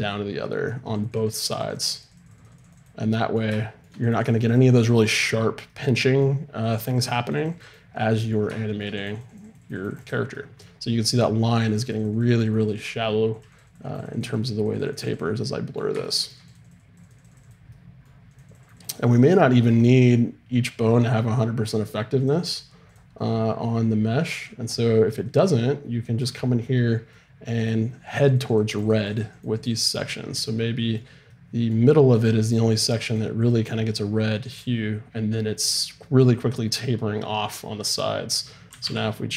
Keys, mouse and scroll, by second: 1.0-24.1 drag, 25.2-26.8 drag, 26.8 middle click, 27.6-31.8 drag, 32.2-38.0 drag, 38.7 r.